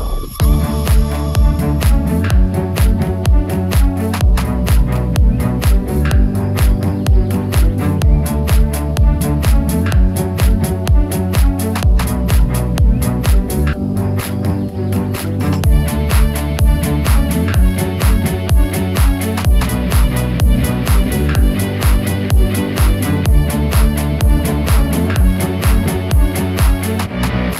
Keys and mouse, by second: 2.4 click, 3.8 shift+click, 4.7 shift+middle click, 6.0 click, 6.3 middle click, 7.2 middle click, 7.7 Tab, 8.2 drag, 8.4-10.6 middle drag, 10.9 shift+middle click, 11.5-12.3 drag, 11.5-12.3 right drag, 13.1 Tab, 13.5 2, 14.8 alt+click, 16.1 ctrl+b, 23.0-24.5 drag, 24.5 middle click, 25.2 shift+middle click.